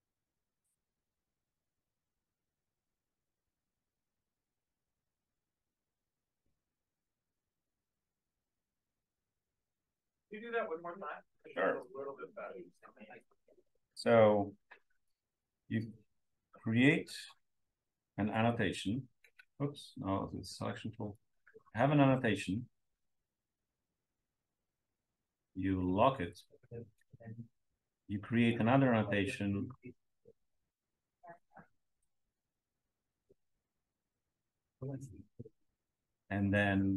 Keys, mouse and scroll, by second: 11.7-12.1 drag, 12.4-12.7 drag, 12.8 drag, 14.9 click, 17.9 click, 18.4 click, 20.1 click, 20.5-22.7 scroll down 1, 21.1-24.6 drag, 22.7-24.6 scroll down 1, 24.6-26.2 scroll down 1, 26.2-26.7 drag, 26.2-26.8 scroll down 1, 26.8-29.8 scroll up 2, 28.5-29.8 drag, 29.8 scroll up 1, 30.4-31.5 drag, 31.8-32.8 drag, 33.7-34.9 drag, 34.9-36.9 scroll up 1.